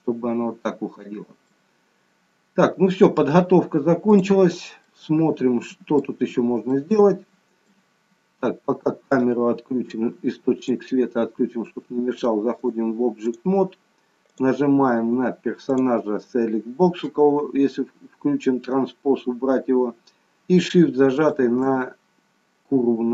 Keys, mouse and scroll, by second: 4.9 middle click, 6.6 shift+middle click, 9.1 click, 10.6 click, 12.5 click, 14.3 click, 15.6 click, 18.9 scroll up 2, 21.1 shift+click.